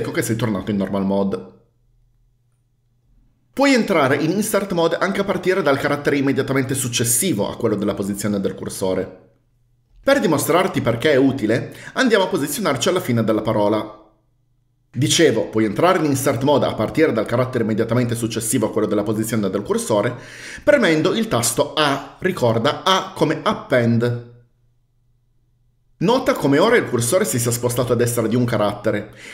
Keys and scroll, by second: 13.6 e, 22.0 a.